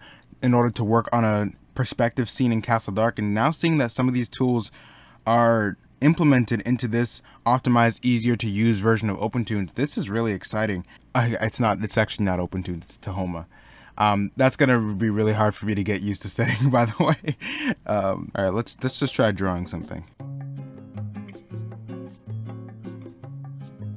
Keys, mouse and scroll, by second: 1.8 middle click, 4.3 middle click, 6.3 middle click, 10.9 middle click, 13.6 middle click, 16.7 middle click, 21.0 ctrl+z, 22.2 ctrl+z, 23.2 ctrl+z, 23.5 ctrl+z.